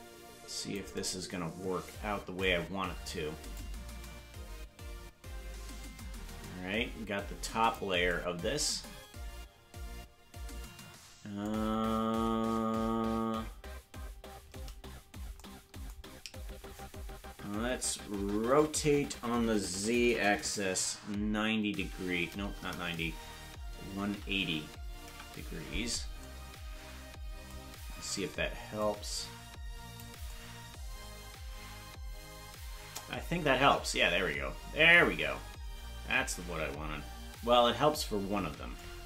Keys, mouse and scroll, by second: 3.5-7.7 drag, 18.5 r, 28.8-30.0 drag.